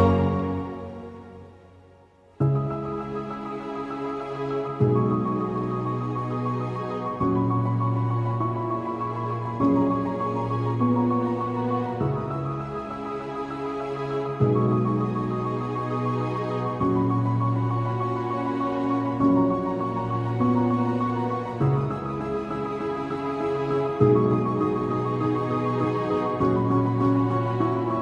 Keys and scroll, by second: 12.1 space, 19.3 ctrl+i, 19.9 ctrl+space, 24.3 alt+space.